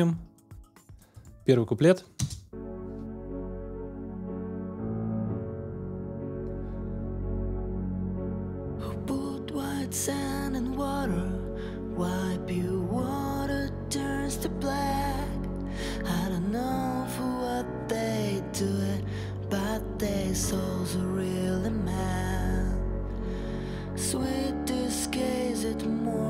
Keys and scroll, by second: 2.2 space.